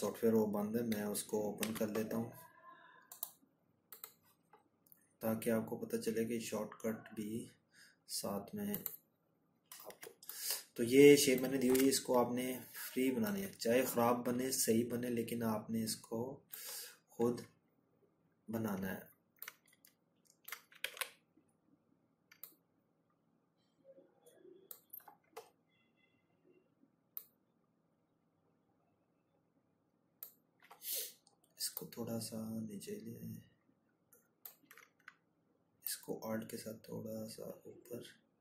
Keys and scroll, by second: 17.3 ctrl+z.